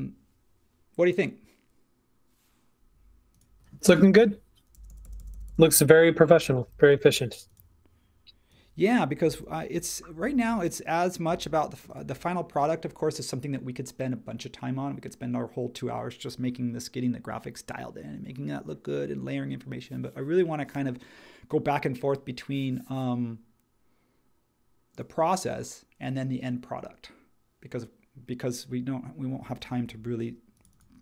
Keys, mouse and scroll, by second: 4.7 Left, 4.9 Left, 5.0 Left, 5.2 typing, 6.3 super+z, 10.1 Left.